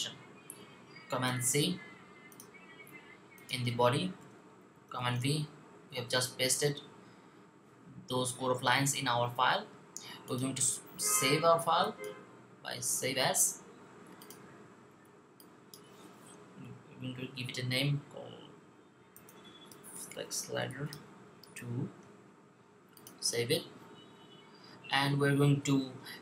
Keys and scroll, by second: 1.2 super+c, 4.8 super+v, 18.6-21.4 typing.